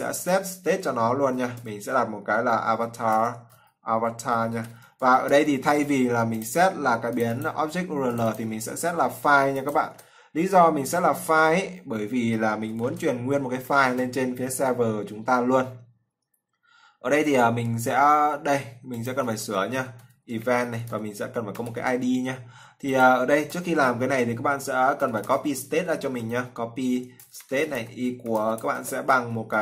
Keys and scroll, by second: 8.9 ctrl+c, 9.7 ctrl+v, 13.2 ctrl+s.